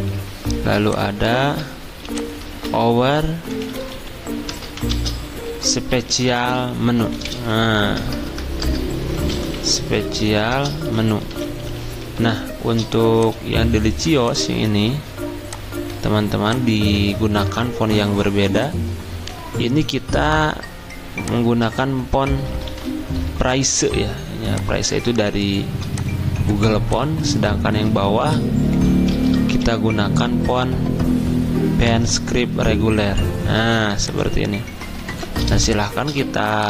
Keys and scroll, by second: 0.0-0.6 typing, 2.5 ctrl+a, 3.8-12.7 typing, 15.1-15.8 typing, 22.2-23.2 typing, 28.9-30.0 typing, 35.5 d.